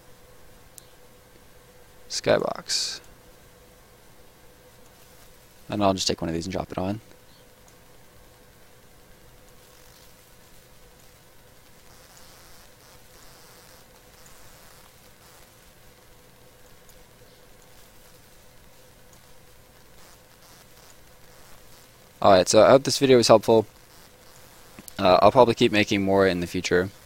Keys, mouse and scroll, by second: 2.3 click, 3.3 scroll down 1, 4.8 click, 9.5 click, 11.6 scroll down 1, 11.8 right click, 12.4 middle click, 13.1 right click, 13.4 scroll up 1, 13.5 middle click, 14.1 right click, 14.3-14.9 scroll down 2, 14.5 middle click, 15.2 middle click, 16.6 click, 19.8-20.3 scroll down 2, 19.9 right click, 20.3 middle click, 20.8 right click, 21.0 scroll down 1, 21.2 middle click, 21.5 scroll up 1, 21.6 right click, 22.0 scroll up 1, 22.1 middle click, 22.6 right click, 22.8 middle click, 23.1 scroll up 1, 23.4 right click, 23.7 scroll down 1, 23.8 middle click, 24.2 right click, 24.4 scroll down 1, 24.6 middle click, 25.0-25.5 scroll up 1, 25.5 right click, 25.9 scroll down 1, 26.1 middle click.